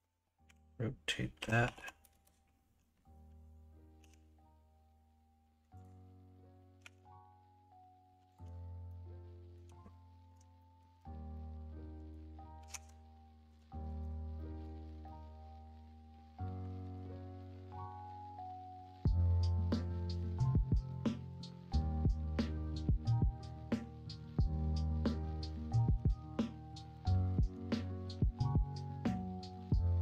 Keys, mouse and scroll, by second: 0.4 r, 4.0 g, 6.8 s, 8.8 shift+middle click, 10.5 shift+middle click, 11.3 middle click, 12.5 s, 13.8 alt+z, 14.3-16.8 middle drag, 17.4-17.8 scroll up 1, 17.8-20.1 middle drag, 20.1 scroll down 1, 20.7 scroll up 1, 20.7 middle click, 20.9 Tab, 21.7-22.4 middle drag, 22.5-22.9 middle drag, 25.3 Tab, 25.9 Tab, 26.8 alt+z, 27.1 middle click, 28.0 Tab, 29.4 s.